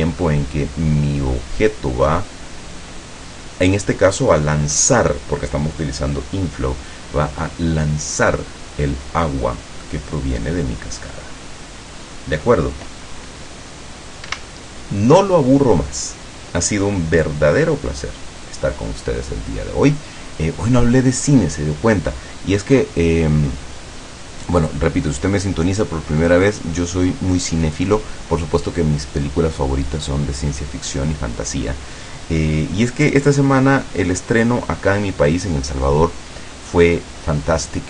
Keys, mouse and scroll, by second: 9.9-12.8 middle drag, 14.4 Escape.